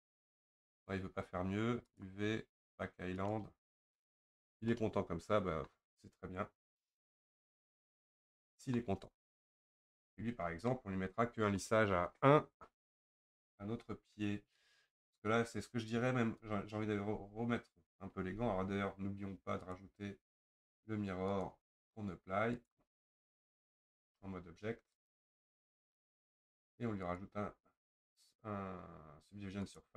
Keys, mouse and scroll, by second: 3.3-4.3 drag, 4.7-9.8 middle drag, 9.8 Tab, 10.4-10.7 scroll down 4, 10.7-16.4 middle drag, 16.4 Tab, 17.1 Tab, 18.4 Tab, 21.4-24.0 drag, 24.0 Tab, 25.6-29.9 drag.